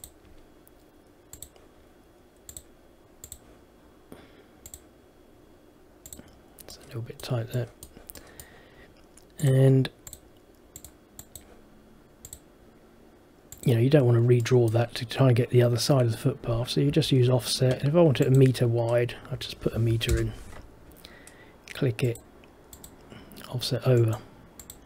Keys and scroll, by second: 17.0 Escape, 20.2 Return.